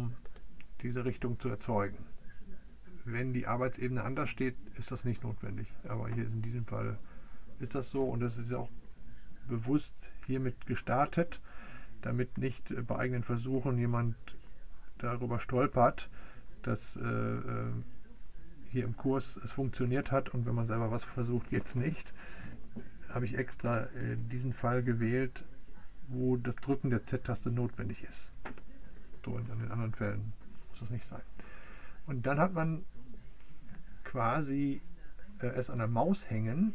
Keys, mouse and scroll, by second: 0.0 z.